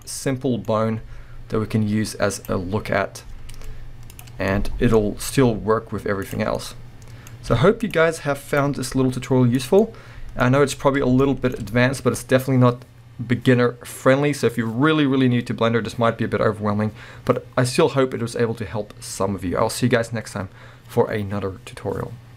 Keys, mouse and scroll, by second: 0.0-2.5 middle drag, 1.0 g, 2.5 click, 2.6-3.2 scroll down 1, 3.2-4.1 middle drag, 4.1 click, 4.3 scroll down 1, 4.5-6.3 middle drag, 5.4 r, 6.3 click, 6.6-7.9 middle drag, 7.5 r, 7.9 click, 8.7 scroll up 2, 8.9 g, 9.8 click, 9.8-20.4 middle drag, 10.5-11.2 scroll up 2.